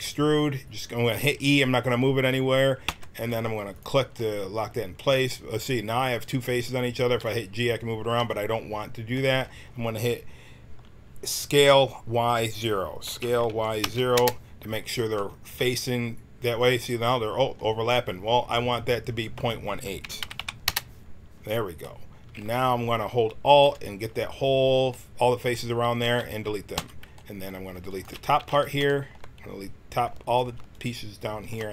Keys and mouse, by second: 2.8 e, 4.1 click, 7.0 g, 13.0 s, 17.4-19.1 middle drag, 19.1-21.8 right drag, 21.8 middle click, 23.4-24.8 right drag, 24.8 middle click, 25.0 click, 26.0 x, 27.8-29.6 drag, 28.3 x, 30.3 alt+click.